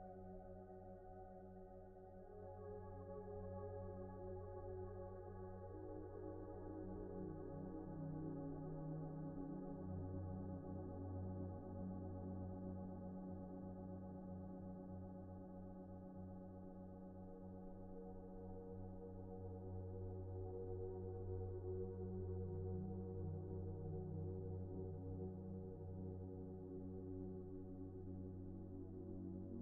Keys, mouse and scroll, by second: 0.4 typing, 1.1 Return, 2.1 typing, 3.2 Return, 4.0 typing, 4.5-5.5 scroll down 1, 5.5 right click, 10.7 middle click, 12.9-13.4 scroll down 1, 13.4 shift+middle click, 13.8 scroll up 1, 14.1 shift+middle click, 19.3 scroll down 1, 20.6-21.4 typing, 21.8 Return, 23.1 typing, 24.7-26.1 scroll down 1, 26.1 Tab, 27.6 double click, 28.6 middle click, 29.0 scroll up 1, 29.2 shift+middle click, 29.5 scroll up 1.